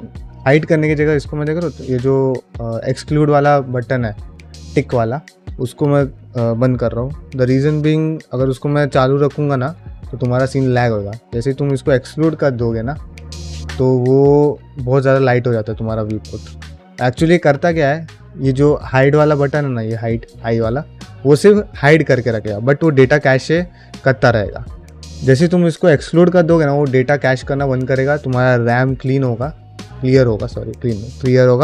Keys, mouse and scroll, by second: 15.3 middle drag.